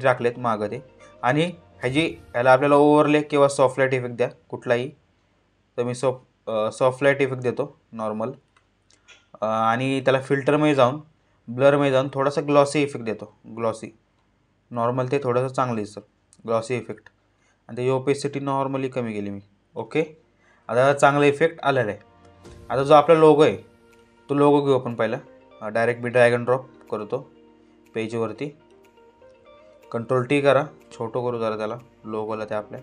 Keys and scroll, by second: 30.1 ctrl+t.